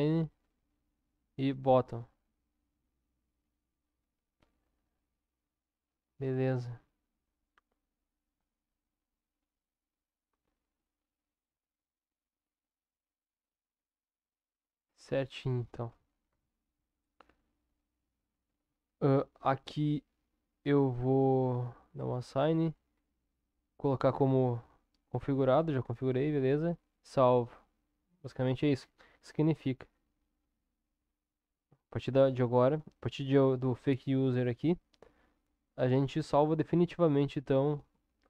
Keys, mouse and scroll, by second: 1.1 click, 2.1 click, 12.7 click, 16.2 Tab, 17.0-18.5 middle drag, 18.5 Tab, 19.5 click, 26.8 click.